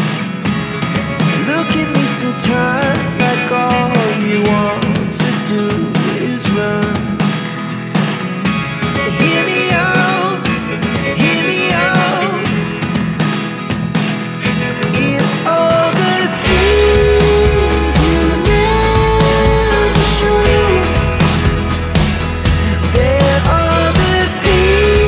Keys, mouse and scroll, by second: 2.6 click, 5.5 click, 5.7 double click, 7.5 click, 13.7 click, 15.2 alt+Delete, 17.5 click, 19.6 ctrl+m, 21.9 click, 24.7 click.